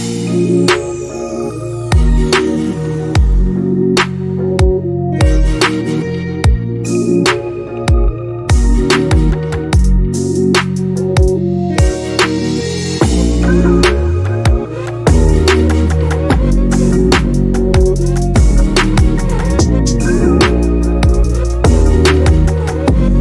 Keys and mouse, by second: 0.7 shift+a, 1.9 shift+middle click, 2.1 click, 2.3-5.9 typing, 2.5 click, 2.9 click, 3.2 click, 3.9 click, 4.5 click, 4.8 click, 5.3 middle click, 5.6 click, 6.0 middle click, 6.3 click, 6.7 click, 6.9 middle click, 7.1 click, 7.3 middle click, 7.6 click, 8.0 middle click, 8.2 click, 9.2 click, 10.4 s, 11.1 click, 12.6 middle click, 12.8 click, 13.1 s, 13.5 click, 14.5 click, 15.3 click, 15.9 click, 16.9 click, 17.3 middle click, 17.8 click, 18.8 shift+Left, 18.8 space.